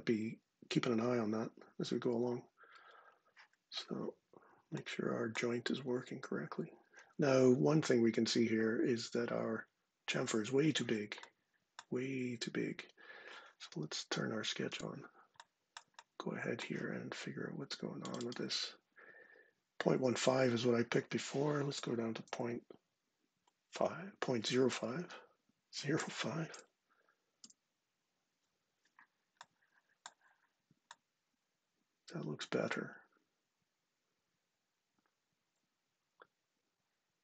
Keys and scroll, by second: 22.0 ., 24.4 Right, 25.7 Left, 26.2 0, 27.1 Return.